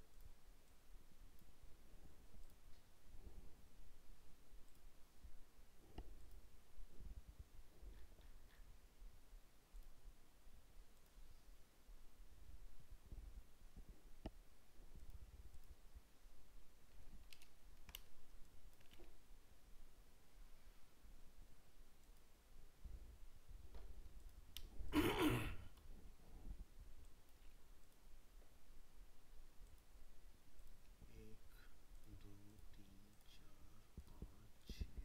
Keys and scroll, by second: 17.3 ctrl++.